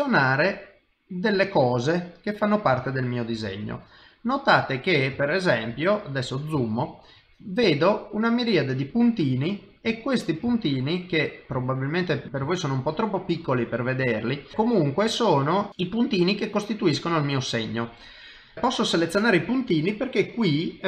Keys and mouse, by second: 0.4 click, 2.8 shift+middle click, 3.5 ctrl+middle click, 4.6 ctrl+middle click, 5.2 shift+middle click, 5.8 ctrl+middle click, 6.6 shift+middle click, 10.8 click, 10.8 shift+middle click, 11.0 middle click, 11.6 shift+middle click, 12.3 ctrl+middle click, 12.5 shift+middle click, 13.4 click, 14.4 middle click, 14.6 shift+middle click, 15.1 middle click, 15.7 click, 15.8 click, 16.9 click.